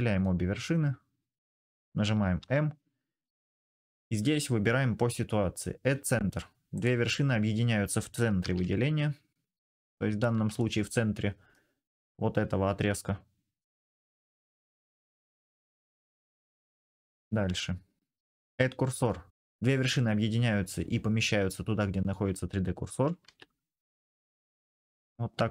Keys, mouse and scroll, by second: 2.2 m, 8.2 ctrl+z, 8.4-9.9 drag, 15.1 click, 17.2 m, 18.3-18.8 drag, 23.0 m, 24.9 click.